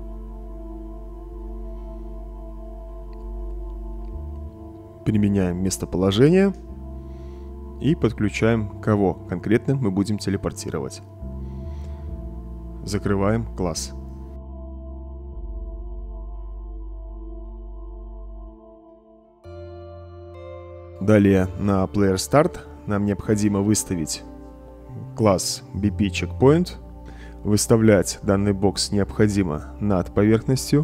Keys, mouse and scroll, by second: 0.3 l, 0.9 p, 4.1 Return, 5.0-6.2 drag, 7.2-8.7 drag, 9.9-11.5 drag, 13.4 click, 14.1 click, 21.3-24.1 right drag, 22.7-23.7 typing, 24.4 right click, 25.0 click, 26.1-28.5 right drag, 26.2-28.8 typing, 30.0-30.8 drag.